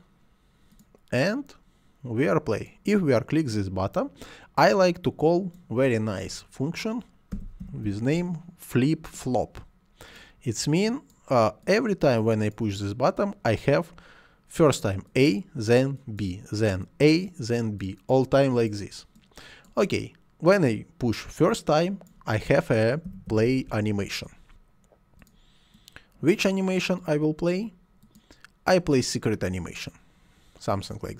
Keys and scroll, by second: 7.1-8.4 typing, 22.8-24.2 typing.